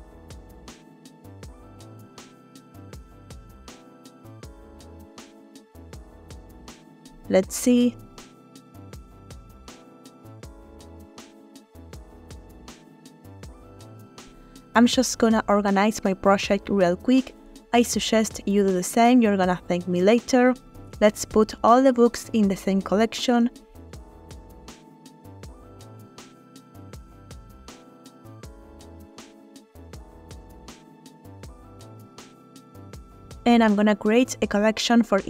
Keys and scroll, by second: 2.0 Right, 2.2 Right, 2.3 Right, 2.6 Right, 4.7 g, 7.2 space, 23.2 Caps_Lock, 23.6-25.0 typing, 23.8 Caps_Lock, 29.4 Caps_Lock, 29.7-31.0 typing, 31.5 Return.